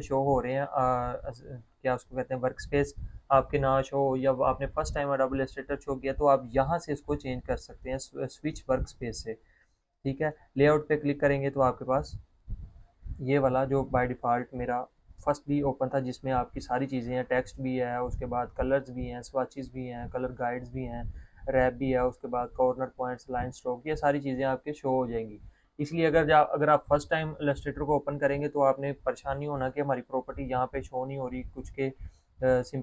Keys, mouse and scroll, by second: 1.0 click, 1.0 click, 9.5 click, 32.6 click.